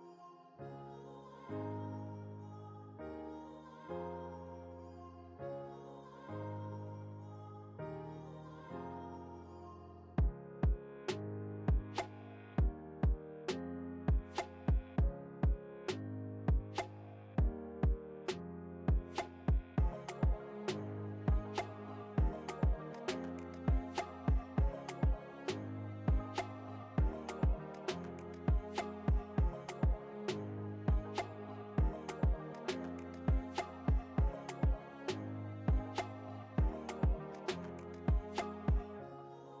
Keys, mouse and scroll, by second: 3.4 ctrl+alt+shift+l, 5.2 ctrl+alt+shift+l, 7.1 ctrl+l, 8.8-22.4 drag, 24.8 space, 24.9 click, 25.2 space, 25.7 click, 26.1 space, 26.6 space, 27.6-37.8 drag, 37.9-39.6 drag.